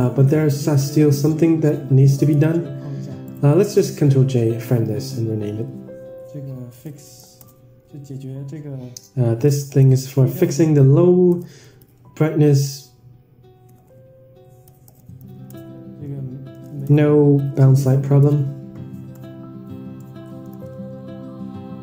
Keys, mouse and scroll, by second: 0.6-1.6 drag, 2.2 ctrl+j, 3.7-21.8 right drag.